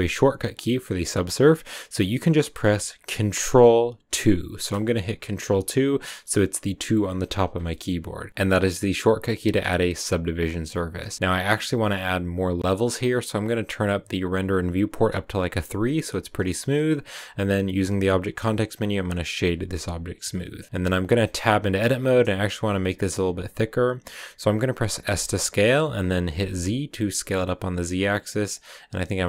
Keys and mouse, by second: 4.4 ctrl+2, 8.3 ctrl+1, 9.3 click, 10.5 click, 16.3 drag, 18.1 w, 20.3-20.6 drag, 21.2 Tab, 25.0 s, 26.5 z, 28.4 click, 29.0 s.